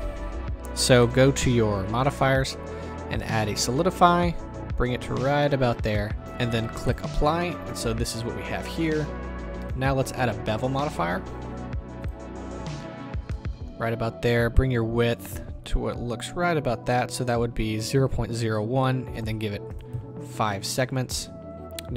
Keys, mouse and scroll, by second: 2.3-5.9 drag, 5.9-6.8 middle drag, 6.8 click, 7.4-9.6 middle drag, 9.6-13.3 drag, 13.0-13.3 scroll up 1, 13.3-14.3 shift+middle drag, 14.3-18.4 drag, 19.2-21.9 drag, 20.7 KP_Enter.